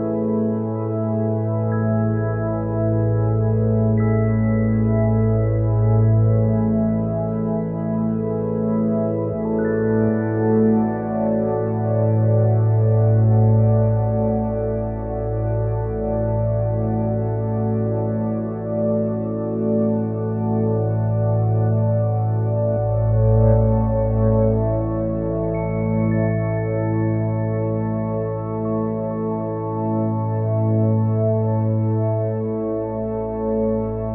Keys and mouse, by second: 0.9 click, 12.8 click, 28.0 click.